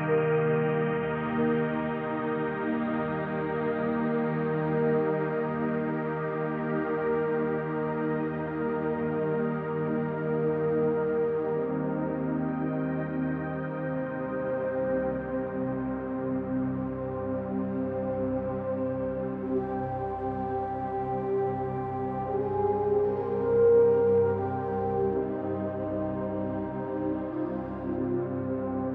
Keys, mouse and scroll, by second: 0.0 click, 1.0 click, 2.4 click, 3.5 click, 4.2 click, 4.5 click, 7.1 ctrl+v, 8.3-10.2 drag, 10.5 click, 11.7 click, 13.4-17.7 drag, 19.5 ctrl+g, 20.1 click, 20.8 click, 21.9 ctrl+d, 22.3 click, 24.1 click, 25.0 click, 25.9 ctrl+click, 26.5-28.9 ctrl+z, 27.8-28.9 drag.